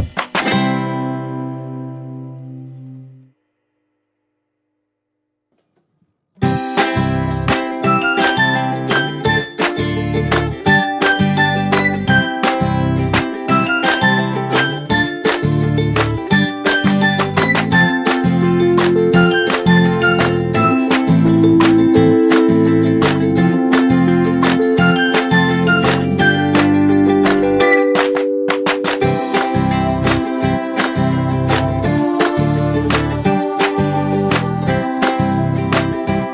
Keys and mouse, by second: 0.9 ctrl+d, 1.8-2.4 drag, 12.0 ctrl+d, 12.5-13.4 drag, 13.8 ctrl+d, 15.0-15.6 drag, 17.5-18.2 drag, 32.7-34.9 drag.